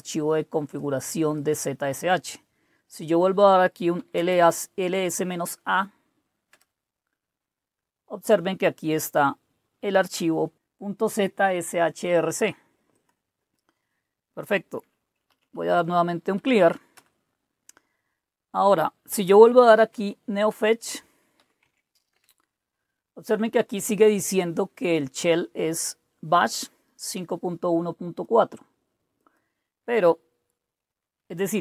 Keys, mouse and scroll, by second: 0.0 click, 1.3 click, 3.0-5.0 typing, 6.4 Return, 9.0-10.2 drag, 12.9 click, 15.0-16.3 typing, 16.9 Return, 19.1-22.1 typing, 26.4-28.2 drag, 29.1 click.